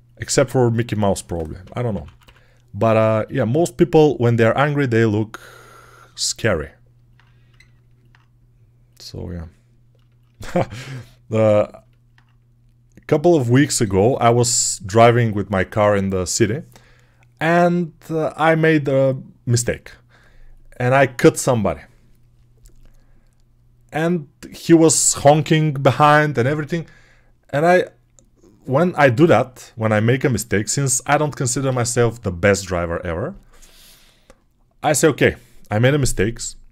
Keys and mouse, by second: 0.2 alt+q, 1.0-2.1 typing, 6.8-9.2 alt+right drag, 9.2-36.7 alt+drag.